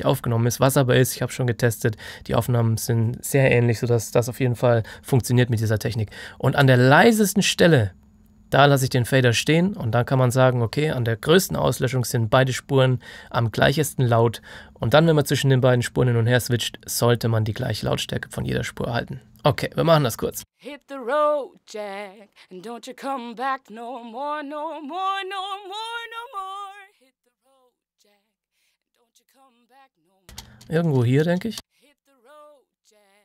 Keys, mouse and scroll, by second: 6.0 click, 20.3 click, 20.4 space, 20.4 click, 30.2 space, 32.7 click.